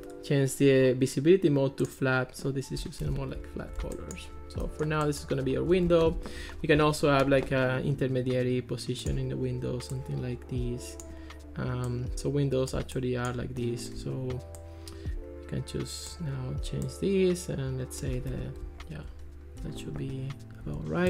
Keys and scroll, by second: 3.1 Escape, 6.1 alt+r, 18.3 Escape.